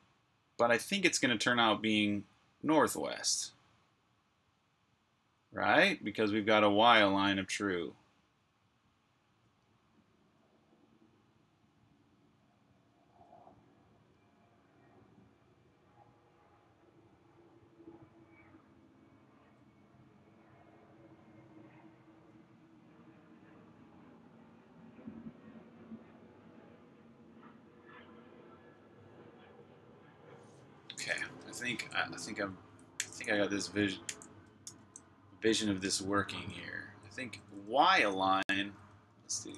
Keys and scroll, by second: 31.1 super+Tab, 32.8 super+j, 34.6 super+k, 35.3-39.2 typing.